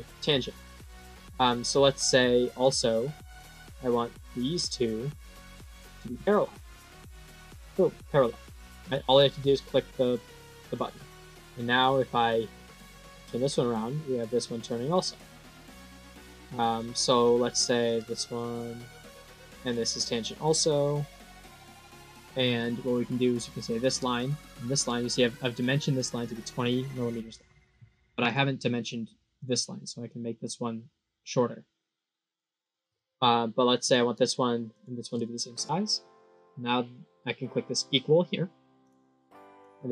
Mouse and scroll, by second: 2.3 click, 4.2 click, 5.3 click, 6.9 click, 10.6 click, 11.1 middle click, 12.6-16.6 drag, 17.1 click, 17.7 click, 19.5 click, 20.7 click, 21.3 click, 22.5 click, 24.4 click, 28.1 click, 28.7 right click, 29.3 click, 30.0-32.2 drag, 32.5 click, 33.7 click, 34.6 click, 38.7 click, 39.4 click.